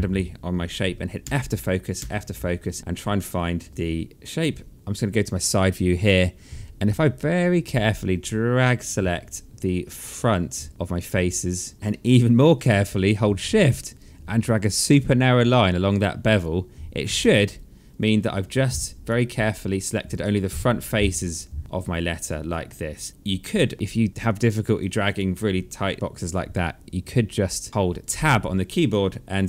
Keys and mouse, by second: 0.8 f, 3.6 space, 4.7 alt+middle click, 6.6 click, 11.7 alt+middle click, 13.5 shift+click, 16.8 space, 18.2 alt+click, 19.7 click, 20.5 alt+click, 24.3 alt+click, 27.0 click, 27.4 alt+click, 28.7 Tab, 29.2 click.